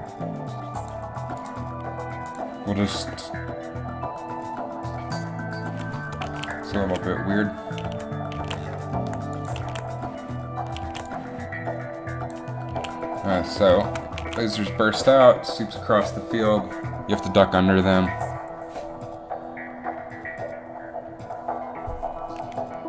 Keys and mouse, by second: 0.6 z, 6.4 alt+a, 7.0 alt+a, 8.0 alt+a, 8.1 alt+a, 8.6 alt+a, 9.5 click, 9.7 alt+a, 10.9 alt+a, 11.1 alt+a, 12.9 a, 14.3 alt+a.